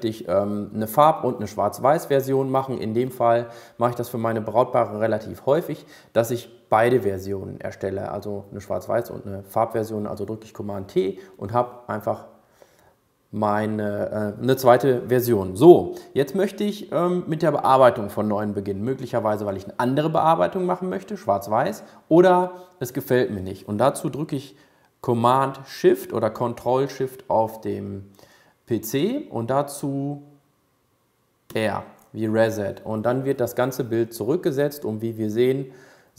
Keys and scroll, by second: 32.1 shift+super+r.